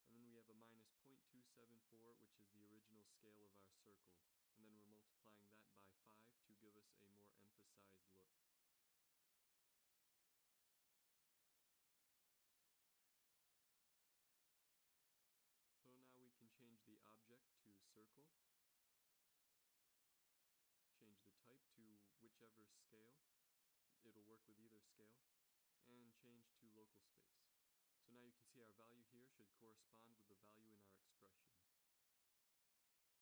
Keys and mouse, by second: 22.0-22.7 drag.